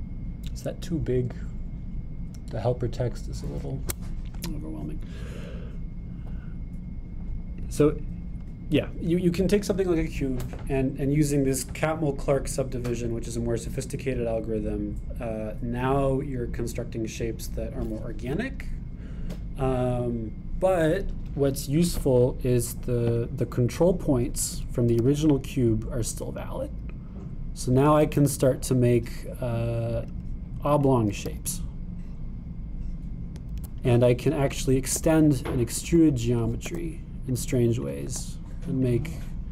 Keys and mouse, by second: 0.8-6.3 super+drag, 6.3-8.3 middle drag, 8.3-24.3 drag, 26.0 g, 31.1 click, 32.3 g, 35.2 click, 36.0 e, 37.7 e, 38.9 click, 39.2 e.